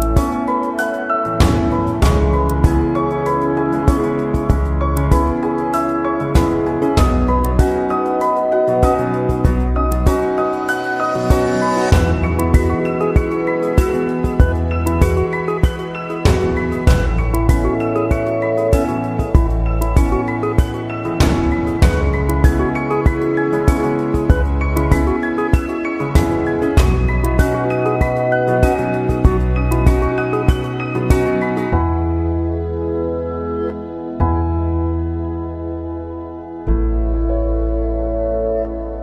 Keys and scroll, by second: 13.1 ctrl+=.